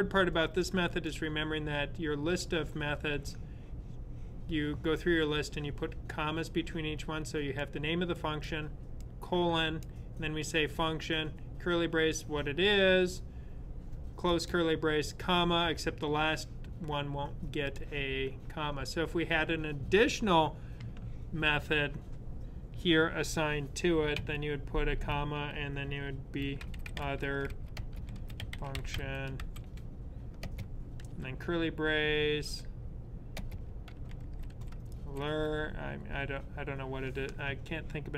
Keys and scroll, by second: 24.0 typing, 26.9-30.9 typing, 33.1-35.8 typing.